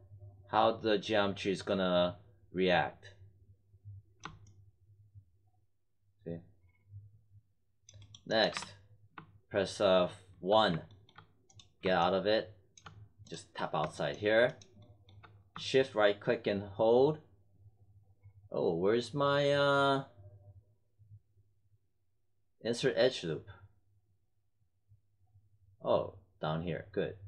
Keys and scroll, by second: 8.5 1.